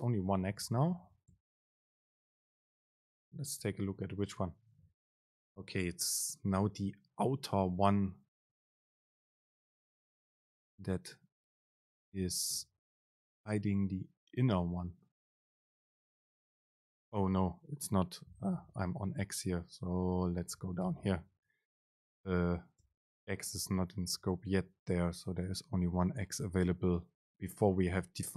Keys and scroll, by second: 3.9 super+b, 18.7 BackSpace, 20.0 Down, 20.9 BackSpace, 23.0 super+space.